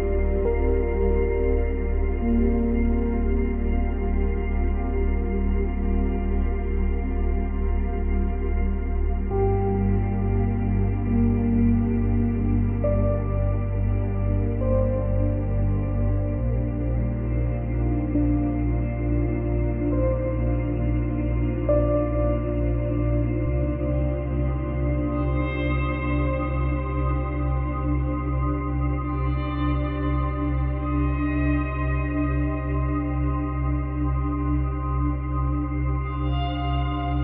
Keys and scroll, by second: 18.3 space, 20.6 space, 20.7 ctrl+z, 27.1 space, 34.7 space, 37.0 space.